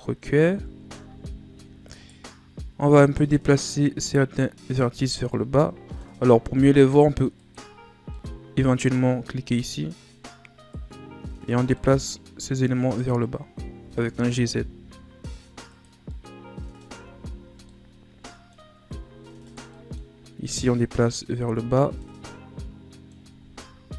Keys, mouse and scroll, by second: 0.6-1.0 scroll up 2, 1.0 Tab, 1.9 right click, 3.0 click, 5.0 ctrl+z, 5.3-7.4 middle drag, 7.4 click, 8.1 middle click, 8.8 scroll up 3, 10.7 click, 11.7-13.8 middle drag, 13.8 g, 16.0 scroll down 3, 16.1 middle click, 16.9 Tab, 17.4 scroll down 3, 17.7 middle click, 18.6 scroll up 1, 18.8 Tab, 19.4 right click, 19.7 middle click, 20.5 click, 21.4 Tab, 21.7-22.0 scroll down 1, 22.0-23.2 middle drag, 23.2 Tab.